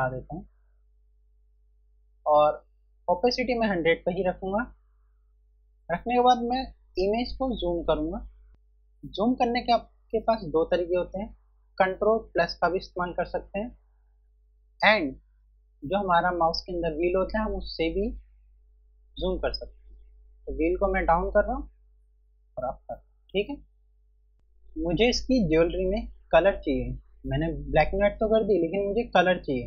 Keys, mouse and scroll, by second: 4.9 F1, 18.2 scroll up 1.